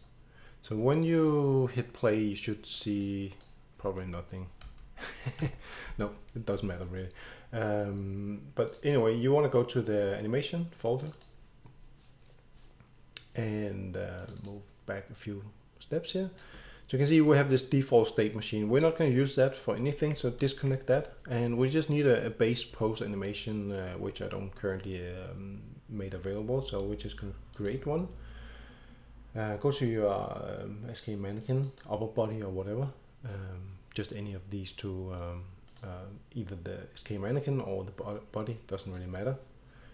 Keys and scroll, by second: 3.8 d, 4.6 s, 5.4 Escape.